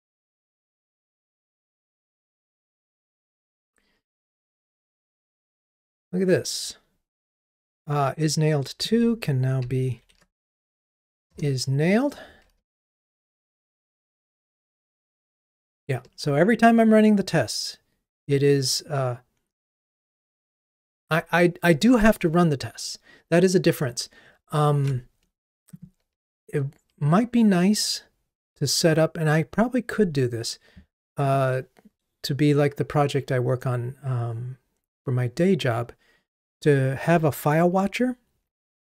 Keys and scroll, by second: 10.1 shift+F6.